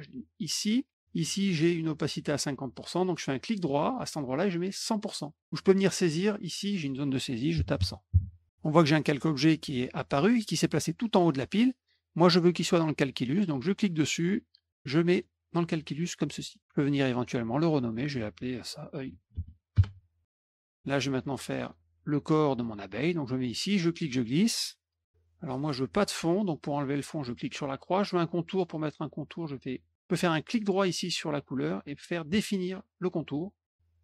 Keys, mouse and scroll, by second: 3.6 right click, 4.8 click, 5.7 click, 5.8 click, 13.7 click, 17.7 click, 17.9 click, 18.8-19.9 typing, 20.4 middle click, 21.6 click, 23.5-25.0 drag, 27.4 click, 30.4 right click, 33.2 click.